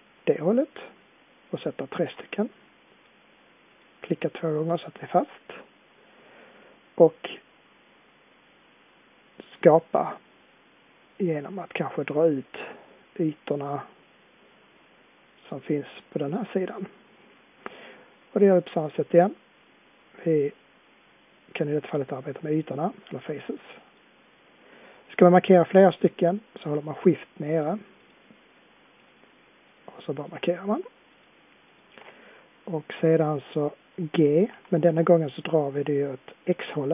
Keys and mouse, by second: 4.7-12.5 middle drag, 21.2-31.8 middle drag, 34.4 g.